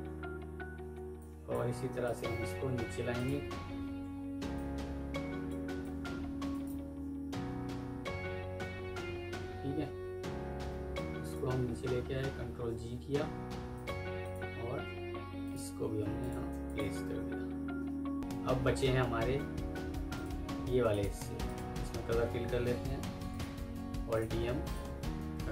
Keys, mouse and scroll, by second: 1.5 Escape, 2.8 Delete, 3.2 Delete, 4.0-4.4 alt+scroll up 1, 4.4 alt+click, 6.4 right click, 10.4 F2, 12.4 ctrl+g, 14.1 double click, 15.3 shift+click, 15.6 typing, 15.9 Escape, 16.5 shift+click, 16.9 typing, 17.7 F4, 18.1 Escape, 18.5 F1, 22.0 alt+e, 22.4 typing, 24.9 typing, 25.3 ctrl+r.